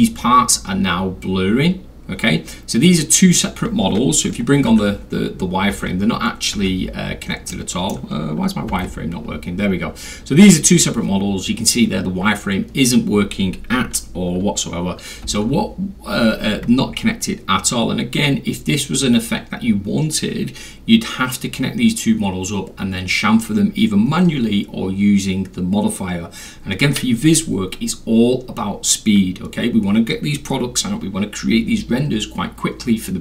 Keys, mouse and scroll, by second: 0.4 middle click, 4.7 F4, 5.3 middle click, 5.4 scroll down 1, 5.4 scroll down 1, 5.8 F3, 6.8 F4, 7.5-7.9 middle drag, 7.5-7.9 scroll, 8.7 F3, 15.3 F3.